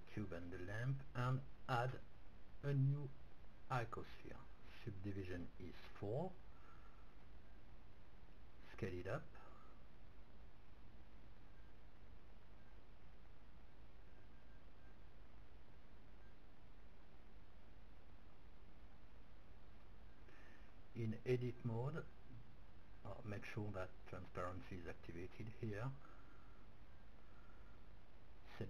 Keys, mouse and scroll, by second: 1.7-3.6 drag, 6.0-8.3 drag, 7.0-9.4 middle drag, 9.0 s, 13.2-15.1 drag, 13.6 s, 15.5-16.7 drag, 15.7-16.7 middle drag, 17.1 click, 19.9 Tab, 22.4 a, 24.1-26.2 drag, 26.6 b.